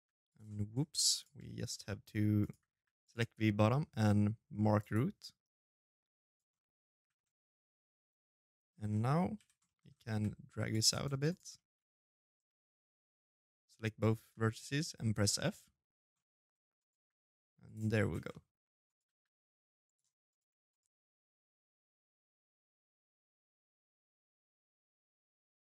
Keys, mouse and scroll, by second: 0.2 shift+middle click, 0.5-1.0 scroll down 1, 1.1 right click, 1.1-1.5 scroll down 2, 1.5 g, 3.5 click, 5.0 right click, 5.3-5.8 scroll up 4, 5.5 middle click, 5.8 shift+z, 6.0 middle click, 8.1 l, 8.4 middle click, 8.8 g, 9.8 shift+z, 10.0 right click, 10.3 middle click, 11.0 shift+right click, 12.9 f, 13.1 middle click, 13.9 z, 14.5 middle click, 15.5 right click, 15.7 g, 16.9 shift+z, 17.0 middle click, 17.6 right click, 17.8 g, 19.0 right click, 19.4 shift+right click, 20.0 shift+z, 21.4 right click, 21.7 v.